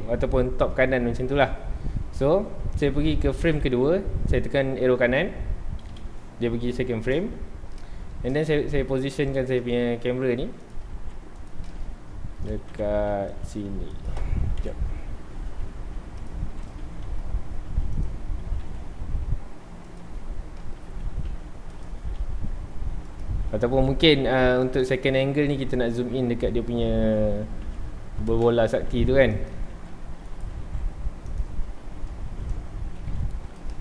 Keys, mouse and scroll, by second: 5.9 Right, 7.7-8.3 middle drag, 8.3-9.9 scroll down 2, 9.9 g, 10.7 click, 10.9 g, 11.5 click, 11.7-12.6 middle drag, 12.6 g, 13.4 click, 13.6 g, 14.0 click, 14.6 KP_7, 15.4 r, 16.3 click, 16.8 r, 18.0 click, 18.3 g, 20.0 click, 20.6-21.0 middle drag, 21.8 click, 21.9 g, 23.2 click, 23.8 g, 24.8 click, 26.2 scroll up 1, 27.6 KP_Decimal, 28.2 scroll down 1, 28.4-28.9 middle drag, 28.9 g, 30.4 right click, 30.5 r, 31.4 click, 31.6 scroll down 1, 32.2 shift+middle click, 32.6 scroll up 1, 33.2 alt+r, 33.5 scroll down 1, 33.7-33.8 middle drag.